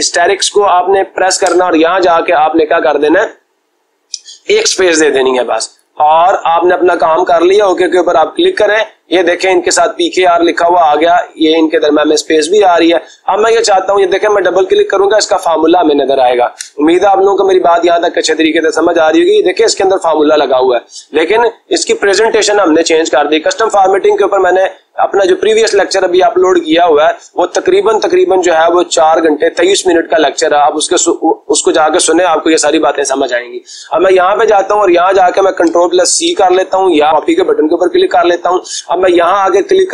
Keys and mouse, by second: 7.5-8.5 drag, 14.2-15.4 drag, 16.5 Escape, 24.6-25.7 drag, 36.2 ctrl+c.